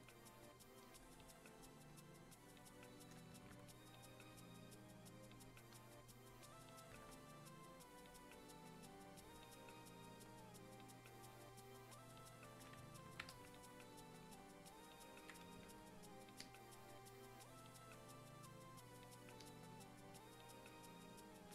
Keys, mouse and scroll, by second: 8.0-21.5 drag.